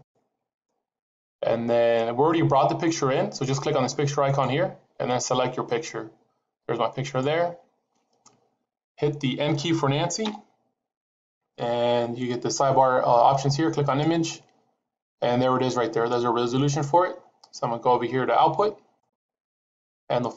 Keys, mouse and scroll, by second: 4.1 click, 8.1 scroll down 2, 8.9-10.1 scroll down 5, 10.1 n, 13.8 click, 18.9 click.